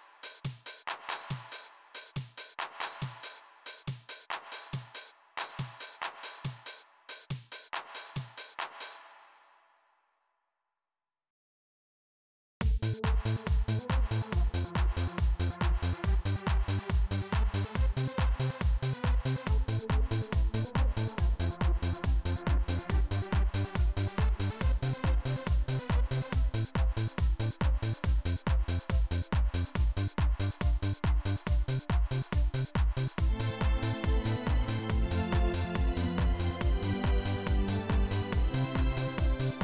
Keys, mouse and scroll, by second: 3.1 right click, 4.3 click, 6.6 right click, 7.2 click, 8.7 space, 8.9 click, 11.0 click, 12.3 click, 18.5-23.9 drag, 27.6 click, 31.3 click, 32.3 click, 32.7 right click, 33.7 click, 34.2 click, 34.8 click, 35.5 click, 38.4-39.6 drag.